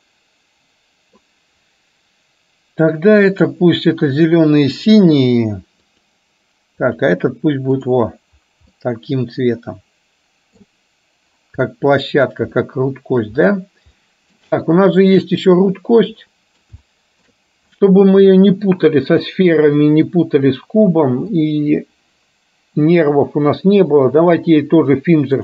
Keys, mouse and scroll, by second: 0.0-1.4 middle drag, 7.9 click, 8.9-10.6 middle drag, 11.7-12.4 middle drag, 12.6-13.2 shift+middle drag, 14.1-14.5 middle drag, 15.2 click, 16.4 middle click, 16.9-17.4 shift+middle drag, 17.9-18.5 middle drag, 21.5-25.4 drag.